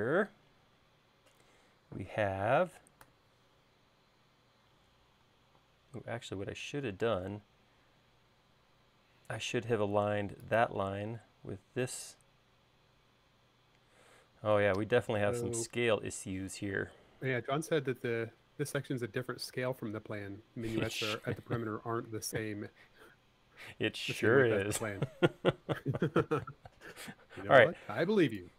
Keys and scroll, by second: 3.1 r, 5.7 space, 7.3 l, 19.9 space.